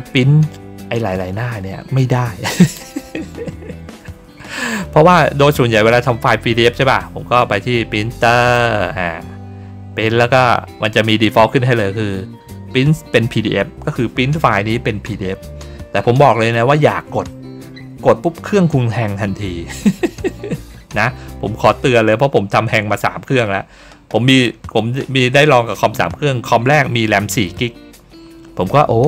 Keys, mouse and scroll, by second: 8.3 click.